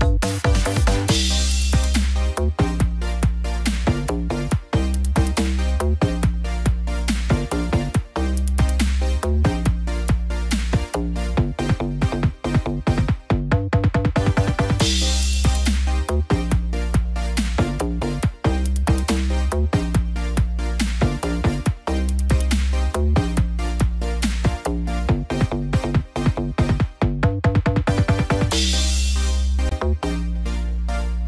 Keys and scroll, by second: 13.6 ctrl+0, 17.5 ctrl+z, 21.2 ctrl+0, 25.1 ctrl+alt+shift+e, 29.1 shift+F5.